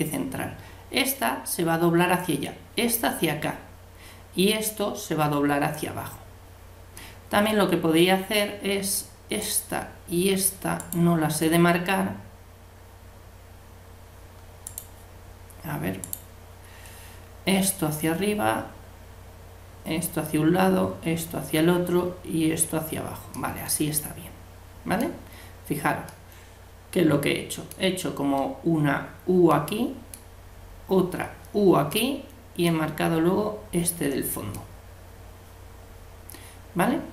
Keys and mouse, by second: 7.0-8.8 middle drag, 9.4-12.6 right drag, 14.7-17.8 right drag, 23.3-26.1 middle drag, 26.4-31.1 middle drag, 31.9-36.3 middle drag.